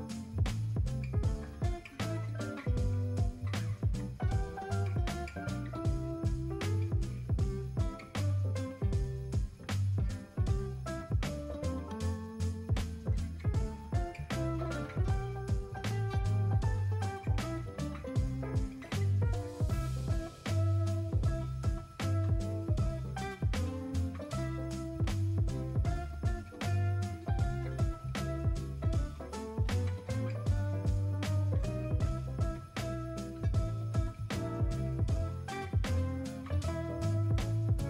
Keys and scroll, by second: 4.2 space, 5.0 [, 5.8 space, 7.8 alt+z, 8.4 ctrl+alt+z, 9.1 s, 9.6 [, 11.0 ctrl+alt+z, 11.3 3, 12.8 ctrl+space, 13.6 ctrl+alt+z, 14.8 ctrl+alt+z, 15.9 ctrl+alt+z, 16.9 alt+shift+n, 19.1 [, 27.8 space.